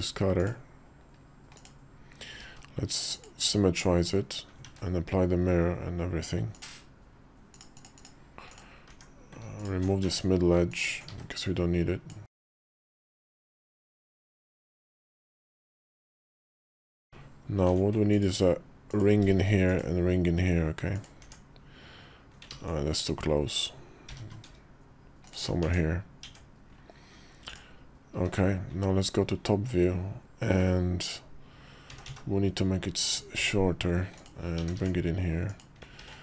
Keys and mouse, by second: 2.2 alt+x, 2.9 click, 4.5 ctrl+`, 7.5 click, 8.6 Tab, 9.8 Tab, 10.9 x, 12.9 Tab, 13.5 Tab, 14.3 Tab, 14.9 click, 15.2 Tab, 16.0 Tab, 17.4 ctrl+r, 19.1 ctrl+r, 21.0 Tab, 22.3 ctrl+z, 23.8 g, 25.4 Tab, 26.0 Tab, 27.2 click, 27.9 `, 31.7 s, 34.3 g, 35.8 ctrl+a.